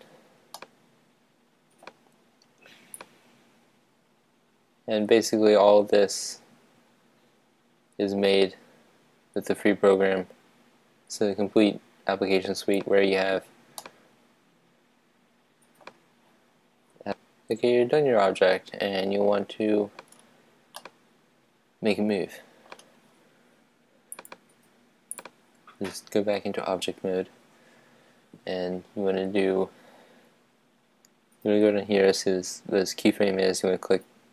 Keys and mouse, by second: 0.7-2.9 middle drag, 3.3-5.5 drag, 13.9-15.8 middle drag, 17.0 click, 17.6-18.9 middle drag, 20.8-22.9 middle drag, 24.3-25.9 drag.